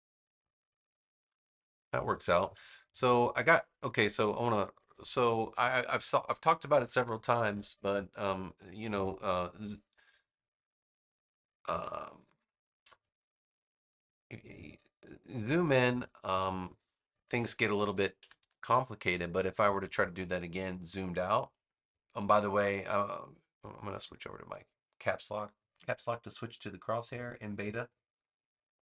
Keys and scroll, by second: 2.4 super+z, 4.2 shift+super+z, 16.3 BackSpace, 17.9 super+-.